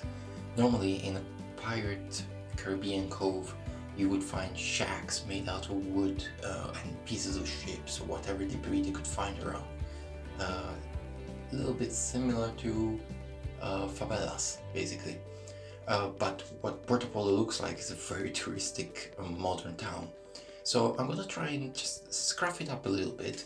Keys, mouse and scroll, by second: 1.1 e, 3.8 middle click, 4.4 shift+scroll up 1, 4.5 shift+middle click, 5.6 middle click, 6.7 shift+middle click, 7.6 middle click, 9.8 right click, 10.5 shift+right click, 13.2 shift+right click, 13.7 middle click, 14.3 shift+middle click, 16.5 e.